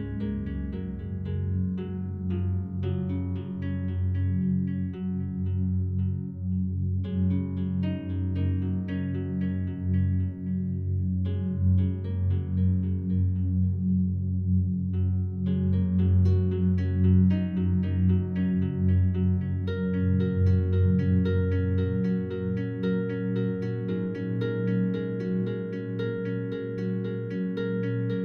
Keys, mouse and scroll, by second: 0.8 click, 4.9 click, 5.9 Delete, 7.3-8.8 drag, 10.7-12.7 drag, 13.3-15.2 drag, 15.7 click, 16.4 Delete, 17.1 click, 17.7 click, 18.3 click, 18.6 Delete, 19.6 click, 20.3 Delete, 21.5 click, 21.9 Delete, 24.0 ctrl+z, 26.2 click, 26.7-27.9 drag.